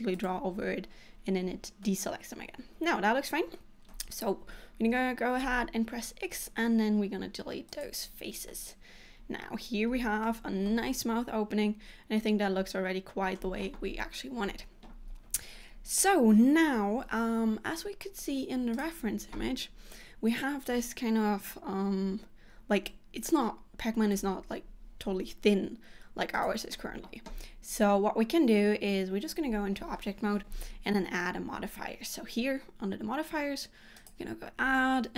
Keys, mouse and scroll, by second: 1.9 middle click, 5.5 x, 8.6 middle click, 10.7 middle click, 28.7 Tab.